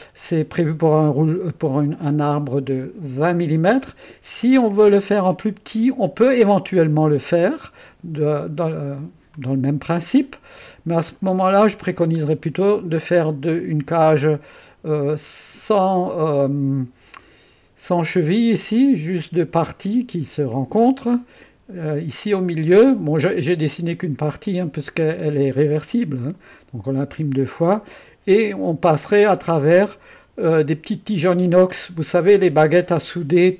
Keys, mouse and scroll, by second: 3.1-6.1 drag, 8.6 click, 12.2-13.0 scroll up 2, 14.1-15.9 middle drag, 15.9-17.8 drag, 21.1-23.7 drag, 24.0 click, 26.7 click, 26.9-28.4 drag, 29.9-33.2 drag.